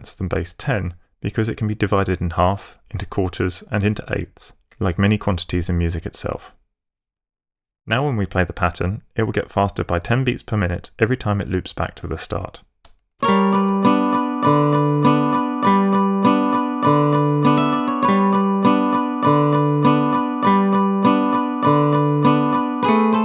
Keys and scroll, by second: 13.1 alt+space.